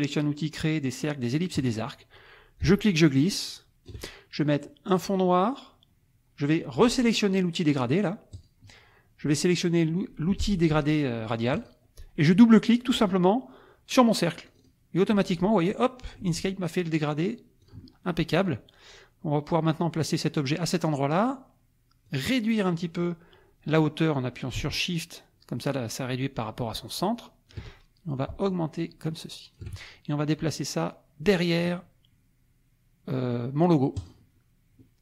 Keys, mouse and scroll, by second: 1.5 click, 2.6-4.1 ctrl+drag, 4.9 click, 8.3 click, 11.5 click, 14.5 click, 17.6 click, 18.4-20.6 drag, 22.0-27.7 drag, 28.5-29.8 shift+drag, 34.0 click.